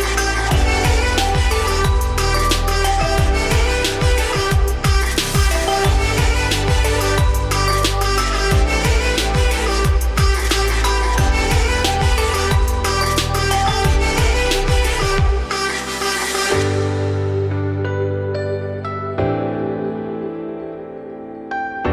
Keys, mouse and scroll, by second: 1.4-2.8 drag, 9.7-15.0 drag, 16.4-17.4 shift+middle drag, 17.4 click, 19.2-21.2 drag, 21.4-21.7 scroll down 2, 21.7 z.